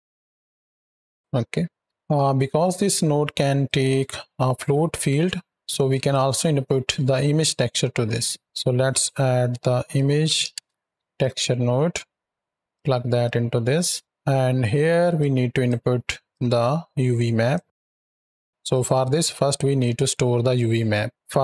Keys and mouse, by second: 1.2-2.7 drag, 1.2 space, 2.7 right drag, 3.5 right drag, 5.4 drag, 5.7 ctrl+click, 6.3 drag, 8.2 shift+a, 12.6-13.1 drag, 13.3-13.7 middle drag, 14.2 middle click, 15.0 click, 16.2-17.4 drag, 18.5 click, 20.8 middle drag, 21.1 click.